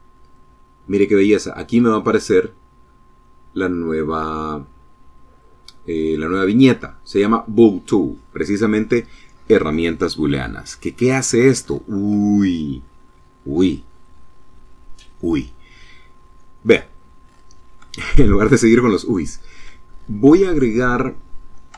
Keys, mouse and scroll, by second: 16.7 shift+middle click, 17.3-18.4 shift+middle drag, 18.6 shift+middle click, 21.0 shift+a.